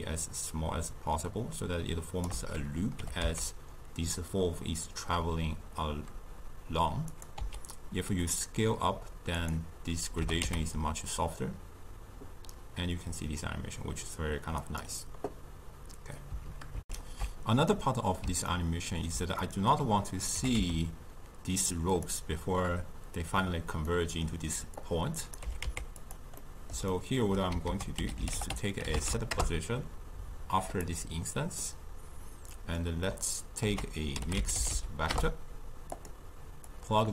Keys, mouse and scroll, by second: 0.0-3.0 shift+drag, 3.0 g, 7.4 s, 10.2 g, 16.9 ctrl+alt+shift+q, 17.7-18.5 middle drag, 18.5 scroll up 2, 18.7-20.4 ctrl+middle drag, 20.4 g, 23.9 middle click, 24.8-25.4 drag, 25.4 g, 26.4-27.7 middle drag, 27.7 ctrl+a, 31.6-33.7 middle drag, 33.7 ctrl+a, 36.7 click.